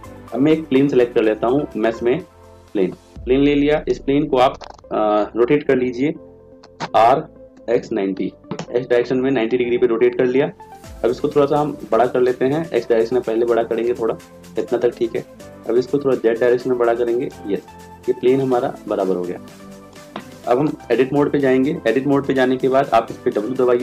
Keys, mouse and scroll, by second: 0.7 shift+a, 20.9 Tab, 23.6 w.